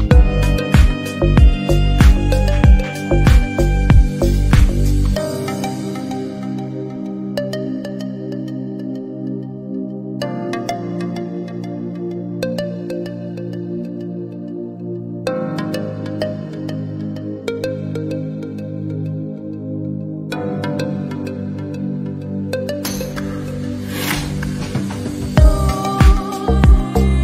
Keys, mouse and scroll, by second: 0.2 g, 2.0 scroll up 3, 2.2 middle click, 3.5 Tab, 3.6 click, 3.8 scroll down 1, 3.9 a, 4.1 alt+s, 4.9 Tab, 5.0 click, 5.2 middle click, 5.6 ctrl+l, 5.9 middle click, 6.4 click, 7.1 alt+z, 7.2 middle drag, 7.4 alt+z, 7.5 middle click, 7.6-8.2 scroll down 2, 8.0 click, 8.2-8.6 middle drag, 8.6-9.3 scroll down 5, 9.5 Tab, 9.7 click, 9.9 middle click, 10.3 s, 11.5 middle click, 11.8 Tab, 11.9 shift+click, 12.2 Tab, 12.4 alt+s, 13.4 middle click, 13.4 Tab, 13.5 drag, 13.6 scroll down 1, 13.7-14.2 middle drag, 14.2 scroll down 1, 14.3 middle click, 14.6 scroll up 3, 14.7-15.3 middle drag, 15.6 click, 15.7 scroll down 1, 16.0 alt+z, 16.0 click, 16.5 1, 16.5 click, 16.9 alt+z, 17.0 s, 18.4-19.3 scroll down 2, 18.6 click, 19.3-19.8 scroll up 2, 20.0 shift+middle drag, 20.1-20.7 scroll up 2, 20.2 shift+middle click, 20.7-21.0 middle drag, 21.0 click, 21.2 Tab, 21.4-24.0 typing, 22.2 Tab, 22.5 click, 23.6 Tab, 25.6 a, 25.9 alt+e, 27.1 scroll up 1, 27.1 g.